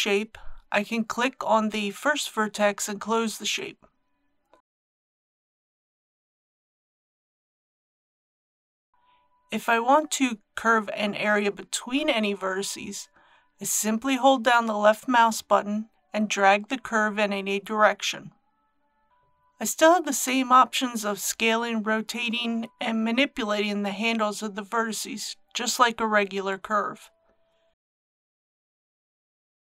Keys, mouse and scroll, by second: 19.1-19.6 scroll down 1, 21.4 click, 22.7 s, 25.0 click, 26.6 r, 29.2 click.